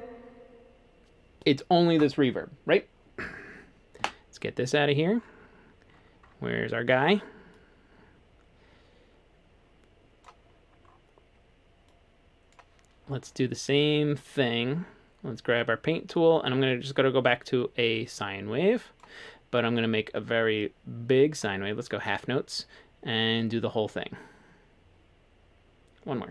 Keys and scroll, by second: 4.0 F3.